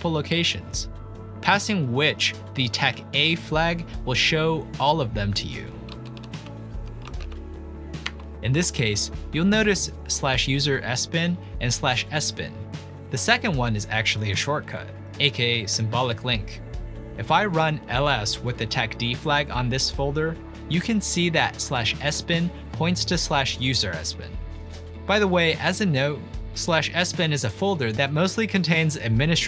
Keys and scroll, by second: 2.8 ctrl+p, 3.7 ctrl+a, 5.3 Right, 5.8 Right, 6.1 Right, 6.2 Right, 6.6-7.6 typing, 8.1 Return, 9.9-11.7 typing, 17.1-20.3 typing, 20.7 Return, 22.3-24.3 typing.